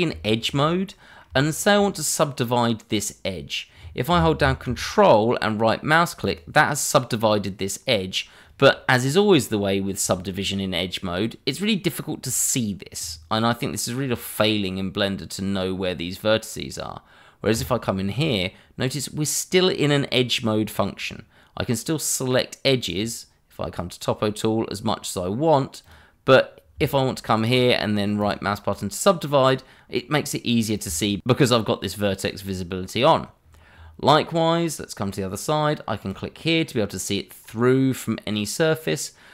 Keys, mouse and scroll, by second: 0.4 shift+middle click, 0.5 scroll up 1, 0.9 middle click, 1.4 shift+middle click, 1.4 middle click, 6.2 ctrl+right click, 6.9 right click, 14.0 scroll up 1, 17.5 click, 18.1 scroll down 1, 22.9 click, 25.8 click, 28.2 ctrl+right click, 29.0 right click, 31.2 ctrl+right click, 31.3 right click, 31.9 ctrl+right click, 32.6 scroll up 1, 33.4 scroll down 1, 34.0 middle click, 36.0 click, 36.8 middle click.